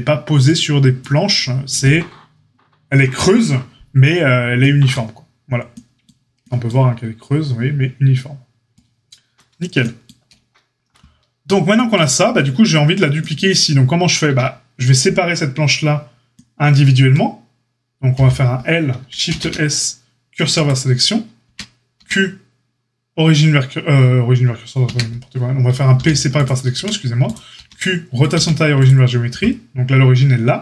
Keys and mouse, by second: 14.2 Tab, 18.1 l, 19.2 shift+s, 21.4 Tab, 21.9 q, 24.8 Tab, 25.9 p, 26.7 Tab, 27.2 click, 27.5 q, 28.3 q.